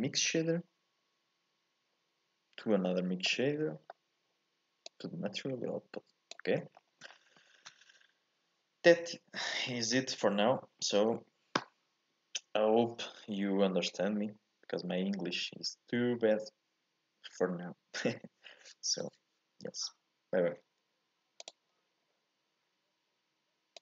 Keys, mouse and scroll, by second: 5.1 click.